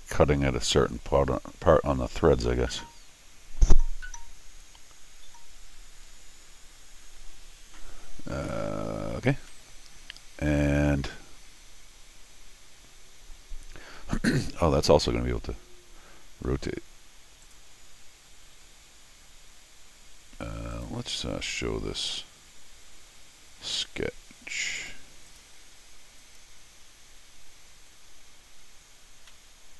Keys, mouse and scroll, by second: 0.7 click, 9.5 middle click, 10.4-16.4 middle drag, 17.4 click, 20.7 click, 24.8 click, 25.3 click, 26.2 click, 29.4 middle click.